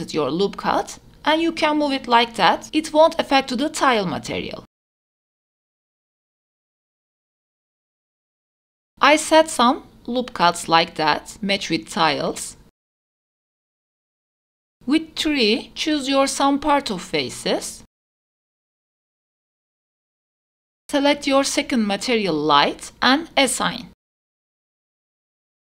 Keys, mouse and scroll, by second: 4.2 ctrl+r, 6.9 scroll down 1, 7.3 shift+middle click, 8.5 ctrl+r, 9.3 ctrl+r, 9.5 ctrl+r, 10.1 scroll down 1, 10.2 shift+middle click, 10.3 scroll up 1, 10.5 click, 10.8 scroll up 1, 11.2 g, 11.3 scroll down 2, 11.5 ctrl+r, 12.1 ctrl+r, 12.5 ctrl+r, 13.1 ctrl+r, 13.1 right click, 13.3 shift+middle click, 13.6 shift+middle click, 14.4 3, 14.8 click, 15.2-15.5 scroll up 1, 15.5 middle click, 16.2 shift+click, 17.3 shift+click, 18.0 shift+middle click, 18.5 middle click, 19.3 click, 19.7 shift+click, 20.0 shift+click, 20.3 shift+click, 20.8 shift+click, 21.1 scroll down 1, 21.2 shift+middle click, 21.9 click, 22.7 click, 23.2 middle click, 24.6 KP_0.